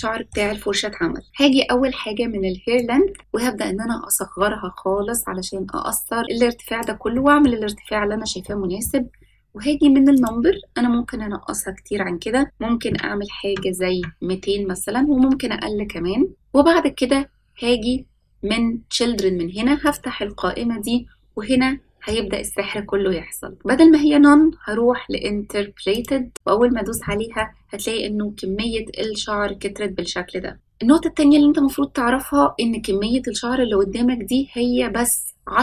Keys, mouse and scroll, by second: 0.4-2.1 scroll up 1, 2.7-6.8 drag, 7.1-7.4 middle drag, 8.4 middle click, 10.1-14.8 drag, 13.4 KP_0, 19.8 click, 21.5-22.0 middle drag, 25.9 click, 26.9-27.3 middle drag, 31.1-32.1 scroll down 2.